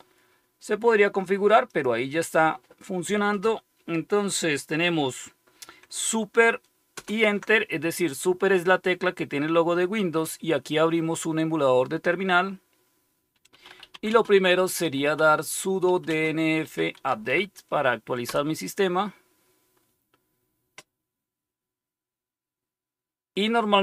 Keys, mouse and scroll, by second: 1.6 click, 6.9 super+Return, 13.2-17.9 typing.